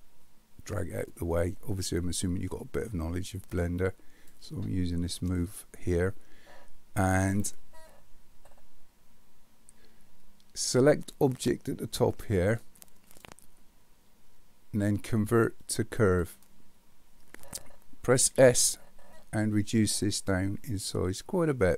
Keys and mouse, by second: 3.8-4.3 drag, 12.6-16.2 drag, 18.3 s.